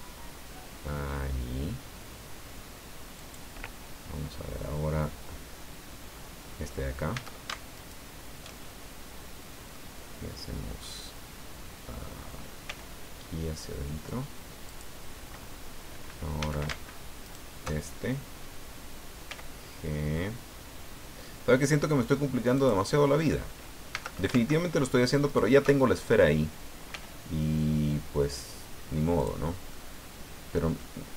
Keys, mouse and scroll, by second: 3.2 click, 6.1-6.4 scroll up 1, 7.1 a, 7.8 alt+shift+right click, 8.7-9.3 alt+shift+scroll down 5, 9.7-11.0 drag, 12.6 g, 14.7 click, 15.3-15.8 scroll up 2, 16.4 a, 17.3 alt+shift+right click, 17.9-18.5 alt+shift+scroll down 3, 19.3 g, 22.6 click, 23.3 scroll up 2, 23.9 a, 25.3 alt+shift+right click, 25.8 alt+shift+scroll down 1, 26.9 g, 29.2 right click, 29.4 scroll down 1, 29.7 middle click, 30.8-31.1 drag.